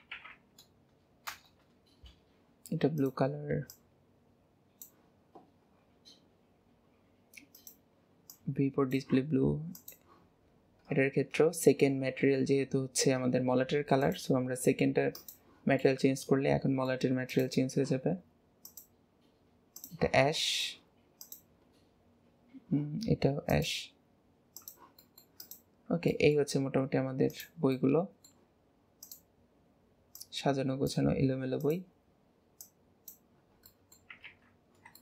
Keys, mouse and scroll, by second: 3.0 drag, 5.2-5.6 scroll down 3, 6.1-6.6 scroll down 7, 6.6 scroll up 1, 7.6 click, 9.7 click, 10.4 scroll down 1, 10.5-14.1 scroll up 12, 14.1 click, 15.8 middle click, 15.9-17.3 middle drag, 17.3 click, 18.7-20.4 drag, 20.4 shift+middle click, 21.2 click, 23.5 click, 25.0-25.4 middle drag, 25.4 click, 25.8 scroll down 1, 26.1 middle drag, 26.6-27.3 scroll down 2, 27.3 click, 27.7-28.5 middle drag, 28.5-29.0 scroll up 1, 29.0 click, 30.1 click, 31.6 click, 32.5 click, 33.3-33.7 scroll down 2, 33.7 middle drag, 34.5 scroll, 34.6-34.9 scroll down 4, 34.9 shift+middle click.